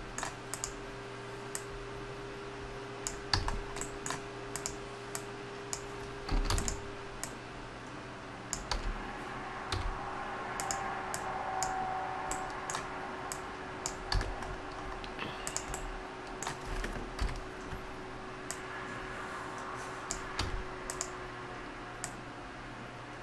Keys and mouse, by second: 3.4 a, 3.5-4.0 middle drag, 4.5-5.2 right drag, 5.2 click, 6.4 shift+d, 8.8 d, 9.7 s, 11.1-12.4 drag, 12.4 middle click, 12.5 click, 12.6 middle click, 14.2 a, 17.2 KP_Decimal, 20.4 a.